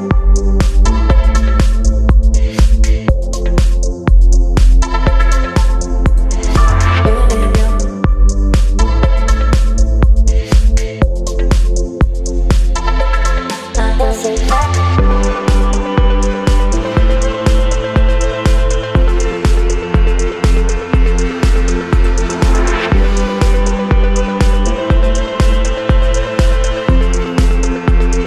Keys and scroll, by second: 2.5 ctrl+t, 3.2 Down, 5.4 Return, 11.8 space, 15.4 ctrl+t, 17.2 Return, 18.4 space, 19.7 ctrl+j.